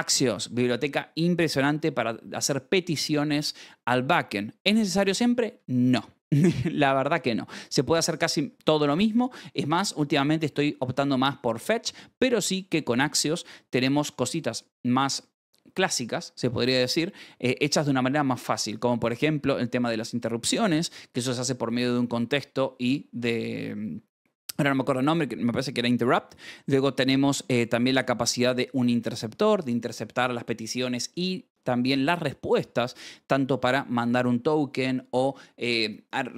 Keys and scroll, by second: 0.0 shift+v, 0.3 Escape, 1.3 j, 5.2 k, 5.5 shift+v, 6.3 Escape, 8.4-9.6 typing, 10.8 v, 11.2 Escape, 13.1 Escape, 14.2 shift+v, 15.7 Escape, 17.4 shift+v, 18.6 Escape, 19.6 Escape, 20.9 j, 27.2-28.2 typing, 29.2 Escape.